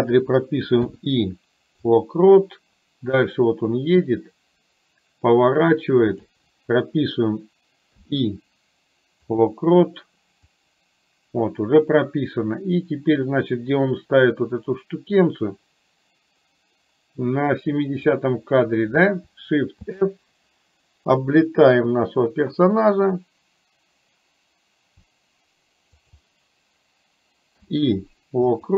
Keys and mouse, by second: 3.3-6.3 drag, 10.5-18.2 drag, 19.9 shift+f.